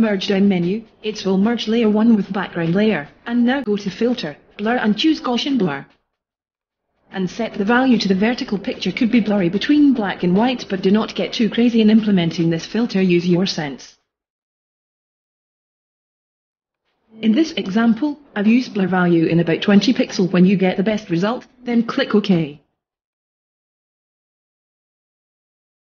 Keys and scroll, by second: 19.8 2.